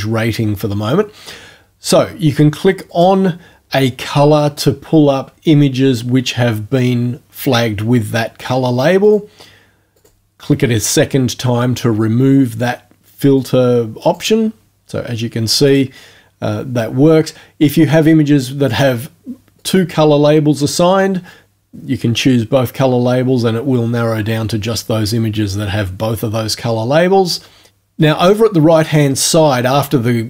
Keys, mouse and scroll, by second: 2.9 click, 9.1 click, 10.0 click, 13.4 click, 14.0 click, 15.7 click, 18.7 click, 19.6 click, 27.3 click.